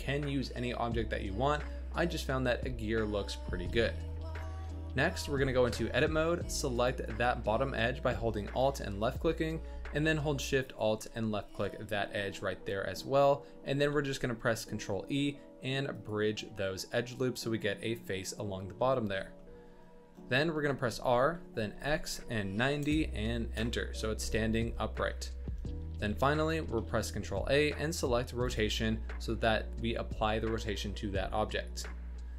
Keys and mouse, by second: 2.7-3.2 middle drag, 4.3-4.7 middle drag, 5.5 Tab, 6.7 alt+click, 10.6 alt+shift+middle click, 12.3-13.3 middle drag, 13.7 ctrl+e, 16.5-18.7 middle drag, 19.1 Tab, 19.4-19.8 drag, 20.7 r, 24.6-25.4 drag, 25.9 g, 26.7 ctrl+a.